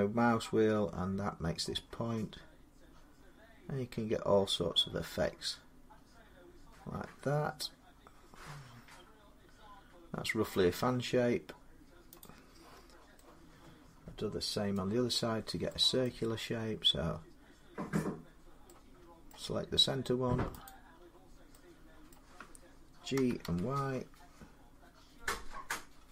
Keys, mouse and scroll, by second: 2.6-3.2 scroll, 4.0 scroll, 4.3 scroll down 9, 4.9 scroll down 2, 6.0 scroll down 1, 6.1-6.4 scroll, 12.0-13.1 drag, 14.5 middle click, 15.8 middle click, 16.3-17.0 scroll up 1, 19.5 middle click, 20.4 click, 21.9 middle click, 22.9 typing, 24.5 y, 25.0-25.4 scroll down 2.